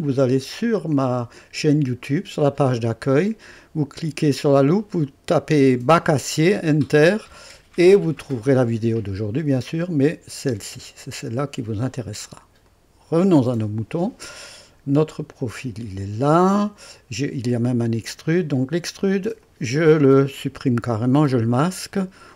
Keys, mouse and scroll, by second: 0.1 click, 2.0 scroll up 2, 7.1 scroll down 2, 12.7 click, 15.4 click, 17.5 click, 19.4 click.